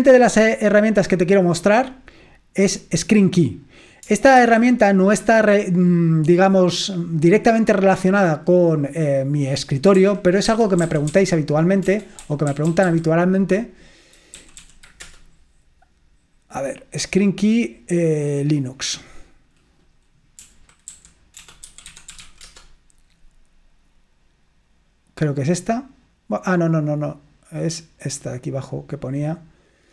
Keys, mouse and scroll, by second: 4.5 super+2, 5.3 super+1, 7.6 click, 9.5 click, 10.0-13.4 typing, 14.4 Down, 14.7 Down, 15.1 Return, 18.1 click, 20.7-22.8 typing.